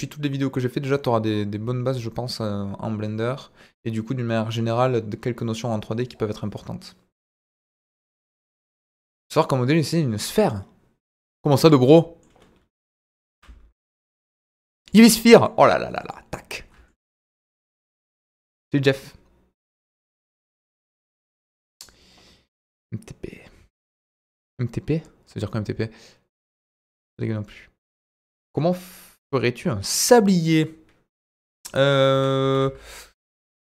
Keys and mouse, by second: 11.6-12.2 middle drag, 13.0 Delete, 13.3 shift+a, 15.2 middle drag, 15.9 right click, 16.3-16.9 middle drag, 30.0-30.5 middle drag, 31.1 Delete, 32.1 KP_1, 32.4 shift+a.